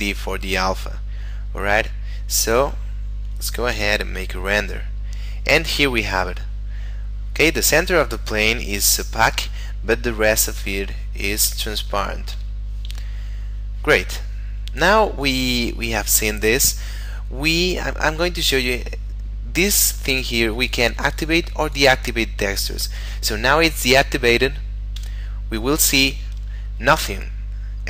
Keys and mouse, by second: 3.7 F12, 12.3 Escape, 13.1 middle click, 15.2 click, 19.8 click, 25.0 F12.